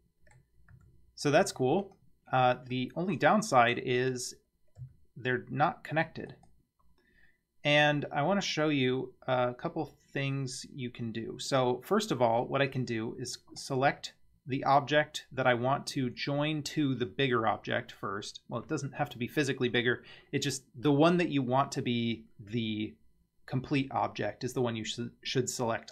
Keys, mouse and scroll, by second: 0.7 Tab, 1.4 Tab, 1.8 click, 2.8-3.8 middle drag, 4.0 click, 4.8 g, 13.6 click.